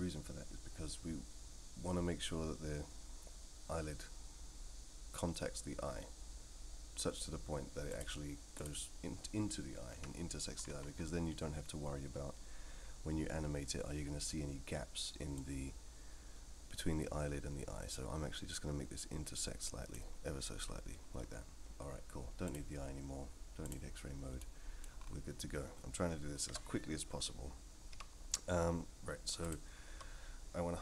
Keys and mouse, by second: 7.9 click, 8.5 click, 9.9 KP_3, 15.4-20.0 drag, 22.4 click, 24.4-24.8 middle drag, 26.5 Tab, 27.9 3.